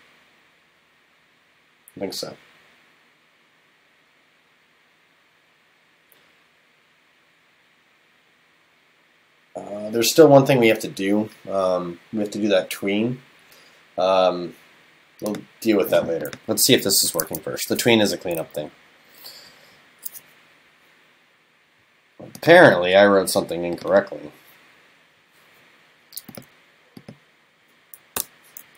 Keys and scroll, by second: 17.2 super+s.